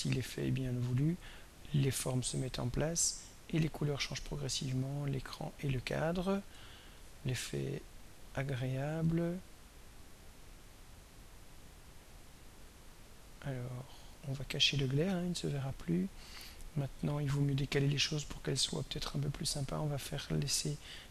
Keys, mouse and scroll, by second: 7.6 scroll down 1, 10.3-21.1 drag.